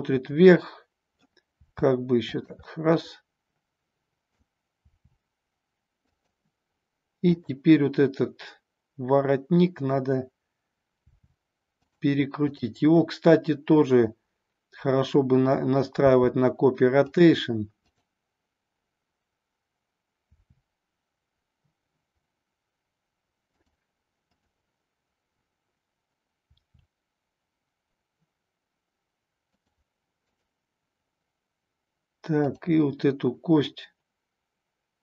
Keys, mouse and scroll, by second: 1.6 r, 2.7-4.2 middle drag, 4.8 r, 6.1 click, 7.2-10.5 drag, 11.0 r, 11.9 click, 12.5-15.4 drag, 16.1 r, 17.7-21.0 drag, 23.6 click, 27.3 r, 29.6 click, 30.1-33.2 drag.